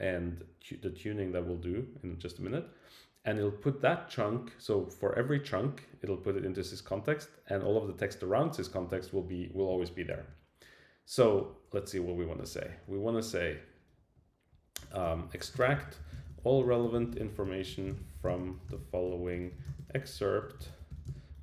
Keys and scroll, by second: 10.1 super+Left, 11.2 Return, 12.0 Up.